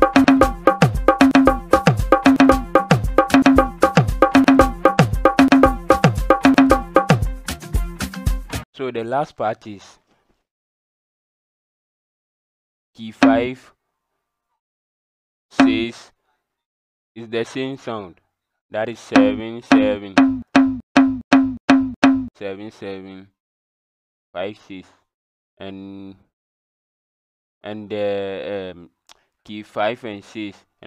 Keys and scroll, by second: 0.7-2.9 typing, 4.5-7.1 typing, 13.1 KP_5, 15.5 KP_6, 19.0-22.0 typing.